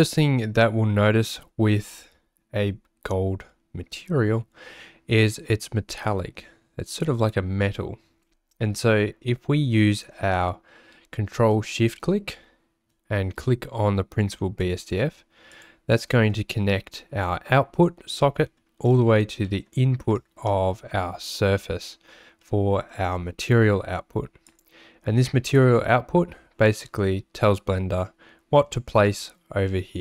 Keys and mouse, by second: 15.5 ctrl+shift+click, 18.2 middle click, 19.5 middle click, 20.2 middle click, 22.4 middle click.